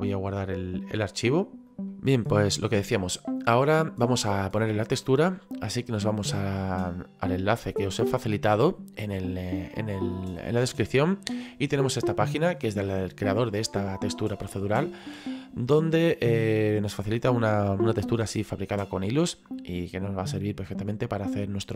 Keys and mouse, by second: 1.7 click, 1.9 middle click, 8.0 click.